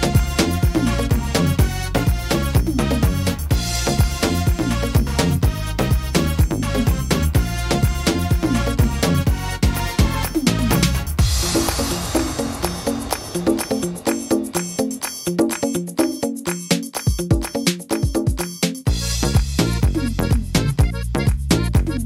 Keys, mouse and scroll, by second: 0.2 middle click, 1.5 right click, 2.6 click, 4.0 right click, 4.4 shift+right click, 5.0 click, 6.6 right click, 7.0 middle click, 7.7 shift+middle click, 8.0 scroll up 5, 8.4 middle click, 8.9 shift+middle click, 9.5 middle click, 11.0 right click, 12.2 click, 13.8 middle click, 14.1-15.2 scroll down 11, 15.0 middle click, 15.8 shift+middle click, 16.4 middle click, 18.8 shift+middle click, 19.2 scroll up 5, 19.9 right click, 20.3 shift+right click, 21.2 click.